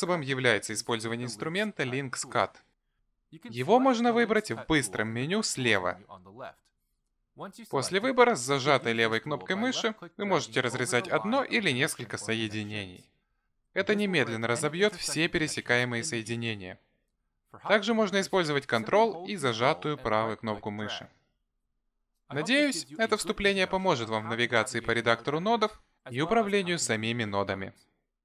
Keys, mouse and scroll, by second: 0.6 ctrl+z, 4.5 click, 7.3 click, 17.8 click, 19.4 click, 21.3 ctrl+right click.